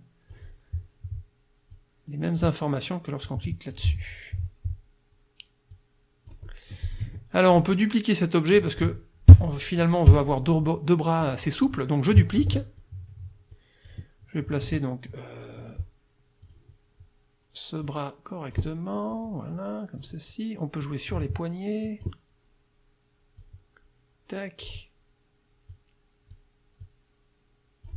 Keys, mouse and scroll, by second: 1.7 click, 3.7 click, 5.7-7.1 drag, 7.1 F1, 7.5 click, 8.6 click, 10.1 Delete, 11.2 click, 12.4 ctrl+d, 12.8 ctrl+click, 13.9 click, 14.7 F2, 16.4 click, 17.9 click, 19.1-20.2 drag, 20.9-22.3 drag, 23.4-24.9 drag, 25.7 click, 26.9-27.9 drag.